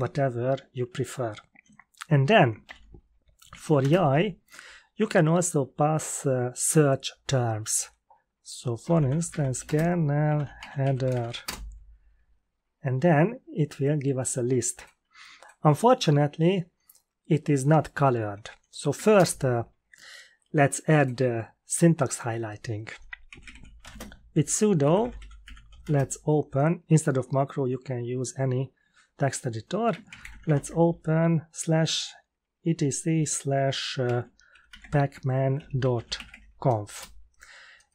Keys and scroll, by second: 2.6 ctrl+l, 3.1-4.1 typing, 8.5-11.6 typing, 18.9 typing, 19.1 Return, 23.0-26.1 typing, 30.0-30.9 typing, 33.8-36.6 typing, 36.9 Return.